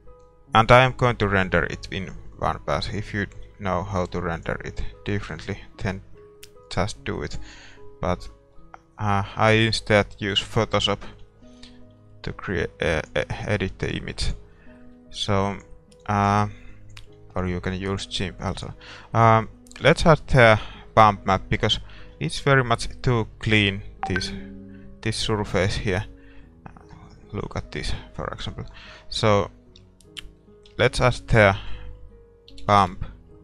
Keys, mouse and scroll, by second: 1.6-3.6 middle drag, 3.6 z, 4.4-6.7 right drag, 5.0-6.7 middle drag, 6.0 a, 16.2-22.2 drag, 22.2 middle click, 22.2 shift+z, 29.4-30.9 middle drag, 30.9 shift+a.